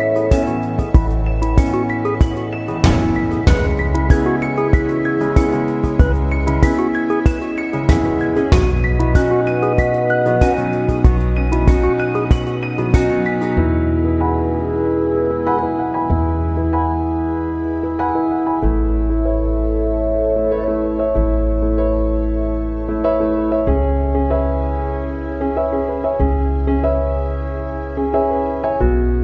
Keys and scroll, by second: 9.8 ctrl+=.